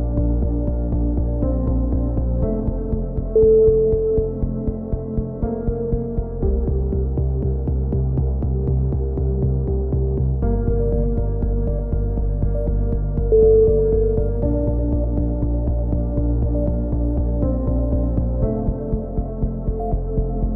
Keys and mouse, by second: 3.4 click, 4.0 ctrl+r, 4.5 click, 4.7 a, 5.1 ctrl+r, 5.2 click, 5.5 right click, 5.7 g, 7.7 KP_1, 8.0 s, 8.9 ctrl+z, 9.5 click, 9.9 s, 10.6 click, 10.9 ctrl+z, 11.4 s, 12.1 ctrl+z, 12.4 KP_7, 12.6 click, 13.2 right click, 13.4 click, 14.0 right click, 14.2 click, 14.8 right click, 15.4 s, 16.1 a, 16.6 click, 17.5-18.8 drag, 18.8 right click, 19.1 KP_3, 19.2 z, 19.7 e, 20.0 click.